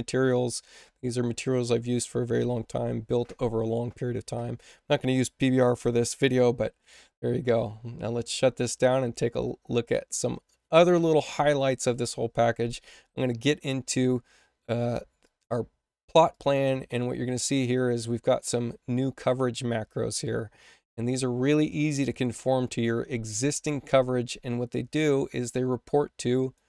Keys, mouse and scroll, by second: 9.4 click, 15.1 click, 16.2 click, 18.6 space, 21.5 click, 26.3 click.